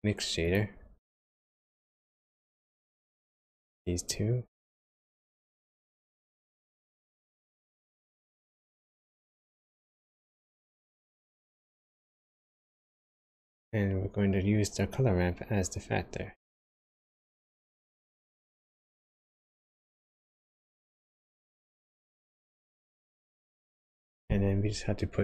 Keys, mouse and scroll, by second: 2.9 click, 4.7 click, 6.8 click, 9.8 middle click, 9.9-10.8 scroll up 7, 10.8 middle click, 12.9 ctrl+shift+click, 14.8 click, 17.5 click, 19.0 click, 21.4 click, 21.8 click, 23.0 click.